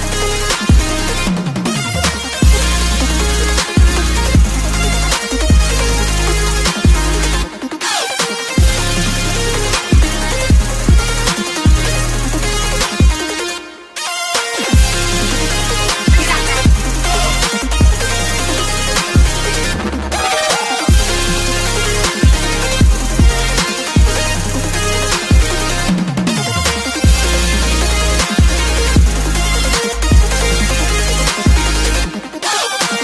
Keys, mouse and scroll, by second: 0.4 click, 1.2 Delete, 1.8 Delete, 4.6-5.7 typing, 6.4 Up, 6.5 Return, 7.7-8.7 drag, 8.2-10.8 typing, 10.8 Return, 11.7-14.2 drag, 14.2 right click, 14.5 Tab, 16.6 ctrl+click, 17.8 right click, 18.9 click, 19.9-21.1 right drag, 22.1-27.0 drag, 27.0 right click, 27.8 click, 28.0 Tab, 28.1 right click, 29.3 click, 30.1-31.5 typing, 32.3 click.